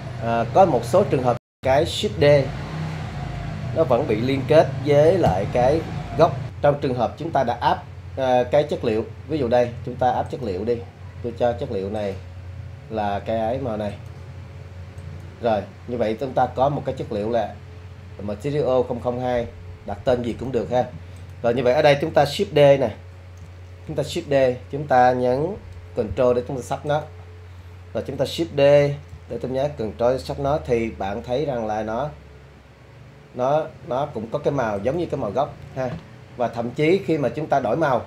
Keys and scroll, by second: 5.5 BackSpace, 7.6 ctrl+BackSpace, 23.9 shift+d, 29.1 ctrl+shift+d.